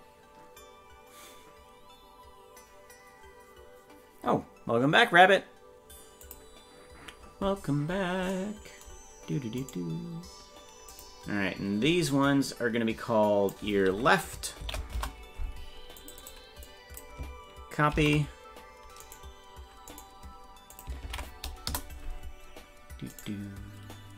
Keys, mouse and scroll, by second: 9.6 right click, 10.9-15.6 drag, 16.0-19.2 drag, 19.9 right click, 20.7-22.0 ctrl+drag, 23.1 right click.